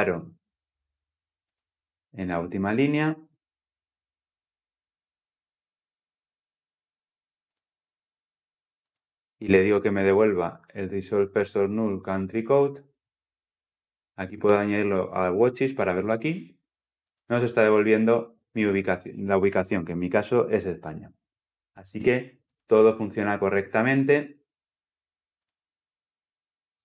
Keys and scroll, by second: 2.5 ctrl+F8, 7.4 F9, 22.4 F9.